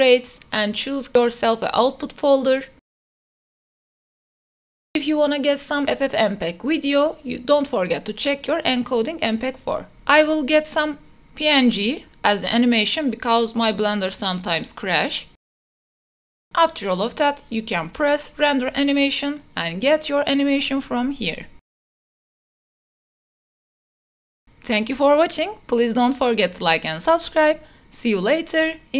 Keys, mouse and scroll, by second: 2.4 click, 5.8-7.8 drag, 8.9 click, 9.8-10.8 drag, 12.1-13.6 drag, 17.9-20.1 drag, 22.9 click.